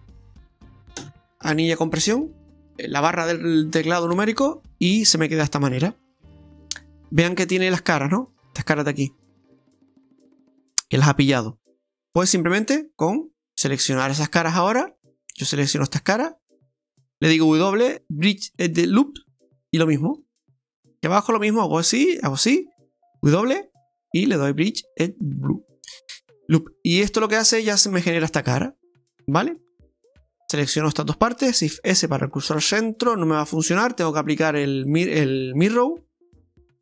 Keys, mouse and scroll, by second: 0.2 l, 2.4 Tab, 4.3 KP_Divide, 4.7 middle click, 6.5 Tab, 6.8-7.3 scroll up 3, 7.3 middle click, 8.6 middle click, 11.4 middle click, 12.4 middle click, 14.9 middle click, 14.9 click, 16.5-17.0 alt+shift+right click, 17.5 alt+shift+right click, 17.5 w, 19.8 right click, 20.9 right click, 21.3 alt+shift+right click, 21.3 alt+shift+right click, 21.5 right click, 22.3 alt+shift+right click, 22.6 alt+shift+right click, 23.4 w, 25.9 scroll down 1, 26.0 middle click, 29.1-29.5 scroll down 3, 29.6 middle click, 30.4 click, 30.4 alt+shift+right click, 30.8 middle click, 31.7 shift+s, 34.9 click, 36.4 Tab.